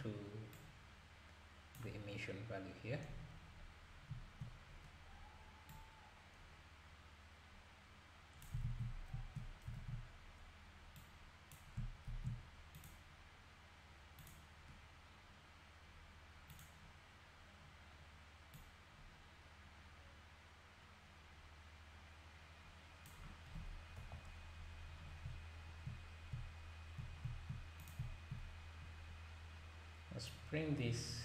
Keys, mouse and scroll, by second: 0.5 drag, 4.7-5.0 scroll up 3, 5.7-8.7 drag, 8.7 ctrl+z, 9.8 ctrl+s, 11.0-12.1 drag, 12.1 shift+d, 14.2-17.2 drag, 18.5-21.6 drag, 24.0 KP_Divide, 25.0 scroll down 1, 26.0-26.3 scroll up 2, 27.8 click, 28.8-30.3 scroll up 2, 30.3 click.